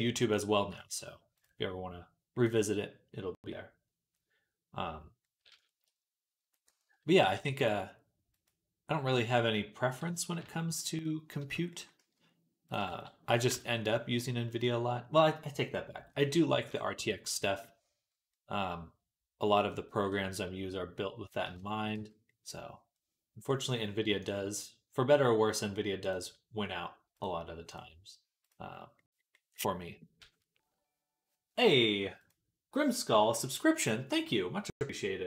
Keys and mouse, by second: 0.2-1.2 drag, 1.2-16.3 middle drag, 7.1 g, 10.5 KP_3, 11.8 z, 12.7 b, 13.3 g, 16.3-21.4 drag, 16.3 z, 16.8 Tab, 17.1 z, 21.4-27.0 shift+middle drag, 21.8 z, 27.0-28.3 drag, 28.3-35.2 middle drag.